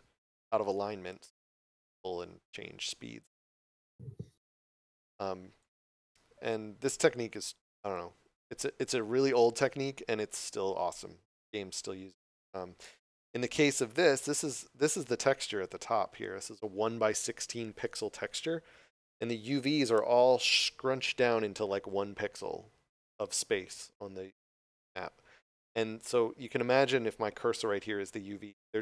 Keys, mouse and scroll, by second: 2.1 click, 9.9 d, 11.7-13.5 typing.